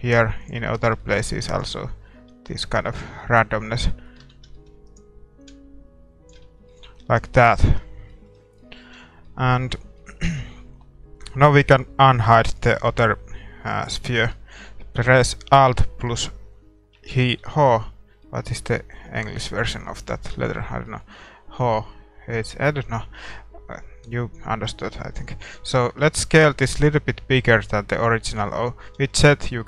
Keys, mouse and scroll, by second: 0.6-2.7 middle drag, 1.3 a, 1.5-3.4 right drag, 2.3-4.0 drag, 3.0 Tab, 3.2-6.2 middle drag, 4.2 Tab, 4.8-6.8 right drag, 5.4-7.0 drag, 6.4 Tab, 6.8-16.9 middle drag, 8.9 a, 16.9 alt+h, 18.2-27.0 middle drag, 26.4 s, 28.4-29.6 middle drag, 29.0 z.